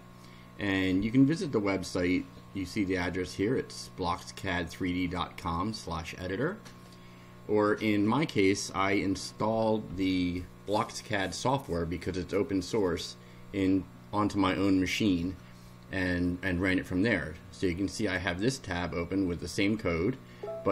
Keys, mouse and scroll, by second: 3.8-5.3 drag, 18.0 click.